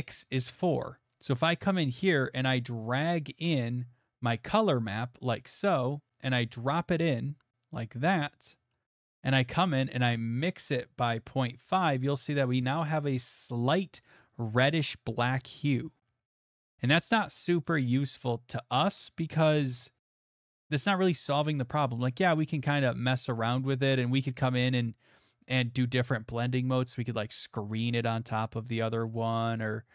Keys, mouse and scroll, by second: 0.2 scroll, 0.8 middle click, 1.3 middle click, 2.1 middle click, 2.4 middle click, 2.4 middle click, 2.9 middle click, 3.0 middle click, 3.0 middle click, 3.4 middle click, 6.8 click, 8.2 middle click, 8.2 middle click, 8.2 middle click, 8.7 middle click, 8.8 middle click, 8.8 middle click, 9.1 middle click, 9.6 middle click, 12.0 click, 12.8 middle click, 13.0 middle click, 13.1 middle click, 13.6 middle click, 14.1 middle click, 14.5 middle click, 15.1 middle click, 16.6 middle click, 17.9 middle click, 18.7 middle click, 19.0 middle click, 19.5 middle click, 20.1 middle click, 20.2 middle click, 20.9 middle click, 23.7 click, 24.2 click, 26.9 click, 28.9 click.